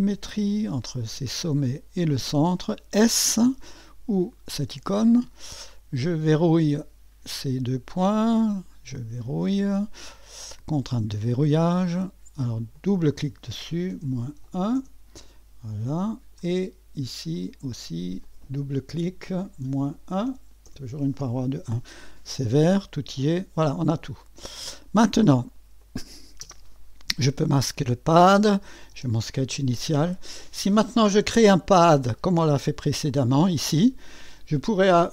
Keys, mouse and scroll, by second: 1.4 click, 4.6 s, 6.3-8.5 drag, 10.4 click, 12.6 click, 12.8 click, 13.9-14.6 typing, 14.7 Return, 15.8-19.6 drag, 19.6-21.1 typing, 20.6 Return, 22.6 click, 23.9 click, 25.8 click, 26.4 space, 27.3 click, 28.6 click, 28.9-29.9 typing, 29.9 click, 30.8-31.4 scroll up 1, 31.4-32.5 middle drag, 32.4-33.2 typing.